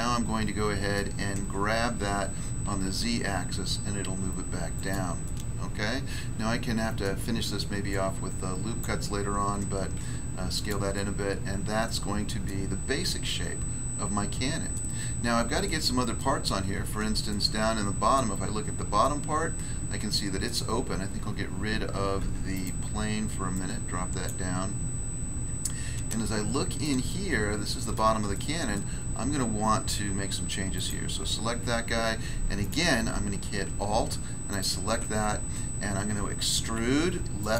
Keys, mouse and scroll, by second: 0.9 middle click, 2.0 g, 2.7 z, 4.7 click, 5.2 middle click, 7.0 middle click, 7.9 click, 8.8 click, 9.9 s, 10.9 middle click, 12.4 middle click, 12.7 scroll down 1, 13.2 middle click, 14.7 middle click, 15.0 scroll down 1, 15.6 middle click, 16.2 middle click, 16.6 scroll up 1, 17.3 shift+middle click, 18.6 scroll up 1, 19.0 middle click, 20.4 middle click, 20.8 scroll down 1, 22.2 Tab, 22.5 right click, 23.5 click, 24.2 click, 25.4 scroll up 1, 26.1 middle click, 28.3 middle click, 29.0 scroll up 1, 30.7 right click, 31.2 Tab, 32.6 right click, 34.5 alt+right click, 36.6 e, 37.4 click.